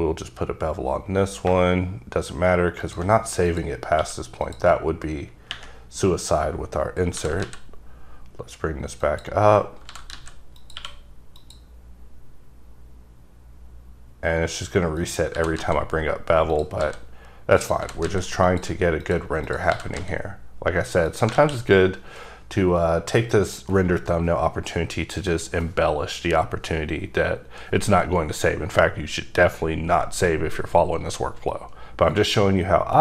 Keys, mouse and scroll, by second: 1.6 shift+click, 3.3 click, 4.1 q, 4.6 click, 6.9-7.3 scroll down 3, 7.3 g, 7.6 z, 9.2 click, 9.5-10.1 scroll up 3, 10.1 g, 10.3 z, 10.7 click, 10.9 q, 11.5 click, 15.1 click, 15.5 g, 15.7 z, 16.7 click, 17.0 s, 17.7 click, 18.0 g, 18.2 z, 18.6 click, 18.7 s, 19.2 click, 19.6 click, 19.8 g, 20.1 z, 21.2 click, 21.5 alt+a, 21.8 scroll down 2, 23.5 click, 32.0 click.